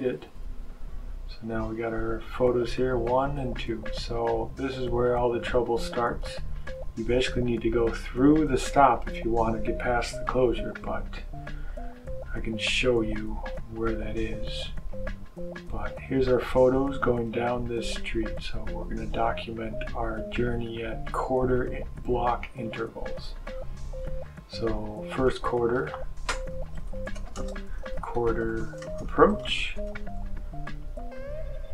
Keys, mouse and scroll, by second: 1.2-2.8 drag, 4.0-7.2 drag, 11.7-13.7 drag, 14.8-17.4 drag, 19.0-20.7 drag, 22.3 click, 24.1 click, 25.2 click, 26.3-30.4 typing.